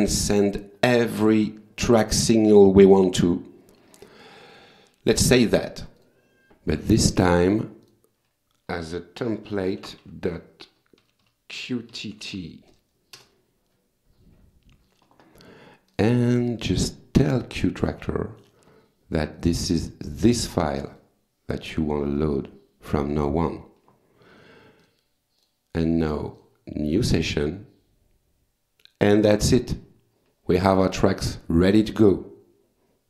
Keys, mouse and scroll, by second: 6.0 click, 6.9 click, 7.8 click, 9.5 End, 9.8 ctrl+shift+Left, 11.0-12.6 typing, 13.2 Return, 15.9 click, 18.1 click, 19.4 click, 20.8 click, 22.2 click, 24.8 click, 25.4 click, 26.4 click, 31.4 click.